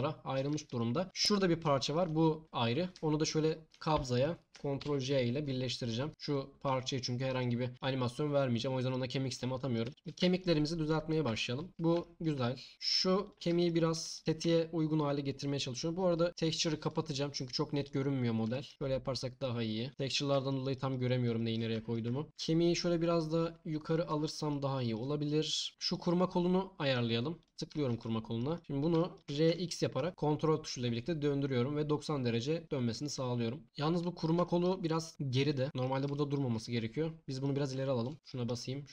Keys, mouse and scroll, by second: 4.8 ctrl+j, 6.3 click, 10.9 click, 11.2 Tab, 14.2 g, 14.4 s, 15.2 click, 16.1 click, 16.3-18.1 drag, 18.7 g, 19.9 click, 19.9 s, 20.1 click, 20.7 ctrl+click, 21.0-21.5 ctrl+drag, 22.3 g, 23.9 click, 25.6-27.7 middle drag, 29.2 r, 29.5 x, 33.6 Tab, 38.1 click, 38.1 t, 38.1 t.